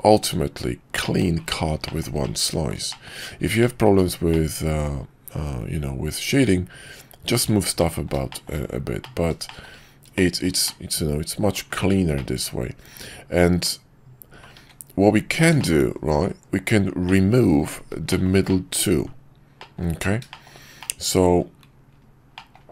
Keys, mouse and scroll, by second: 1.9 shift+middle click, 2.2-2.7 middle drag, 2.9 shift+middle click, 3.6 shift+middle drag, 4.3-7.3 middle drag, 7.8-8.1 middle drag, 8.3 shift+middle click, 9.0 middle click, 9.4 shift+middle click, 10.1-10.4 shift+middle drag, 10.6-11.5 middle drag, 12.2-14.4 middle drag, 15.6 middle click, 15.9 KP_5, 17.0 middle click, 18.1 shift+middle drag, 18.5 middle click, 19.6 middle drag, 20.3 shift+middle click, 20.8-21.4 middle drag, 22.3 middle drag.